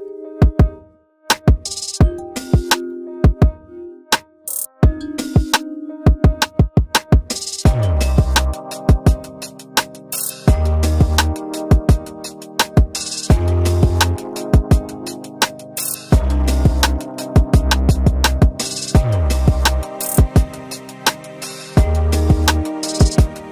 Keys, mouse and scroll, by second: 0.2 ctrl+v.